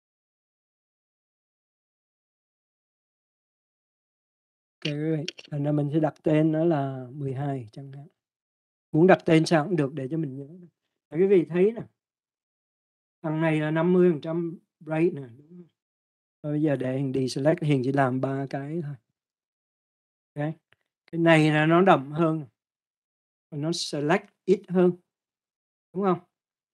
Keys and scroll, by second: 5.2-7.7 typing, 8.7 1, 9.2 2, 10.0 Return, 19.4 ctrl+d.